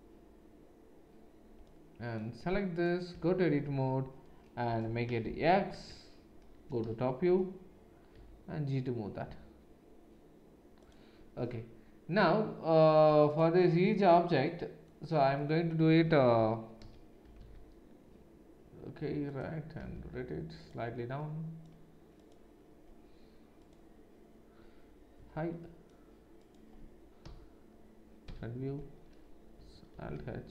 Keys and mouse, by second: 3.1 Tab, 4.7 BackSpace, 5.2 shift+x, 5.7 Tab, 6.8 KP_7, 8.1 g, 16.8 KP_1, 17.2 g, 19.8 r, 22.2 click, 23.6 click, 25.1 h, 26.5-30.5 middle drag, 27.2 KP_7, 28.2 KP_1, 29.9 alt+h.